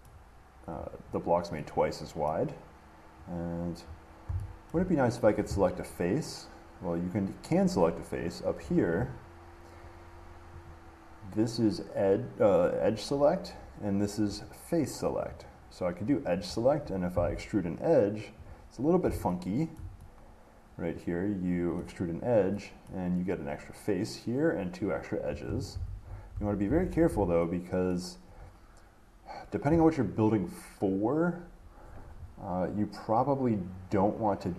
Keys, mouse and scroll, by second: 3.5 click, 4.1 middle click, 4.1 middle click, 4.2 middle click, 4.9 shift+middle click, 6.2 click, 7.0-8.6 drag, 8.8-10.9 middle drag, 10.9-12.9 drag, 14.6-18.4 drag, 18.7-20.0 drag, 20.0-22.1 middle drag, 23.1 middle click, 25.9 ctrl+z, 27.0 ctrl+shift+z, 28.1 middle click.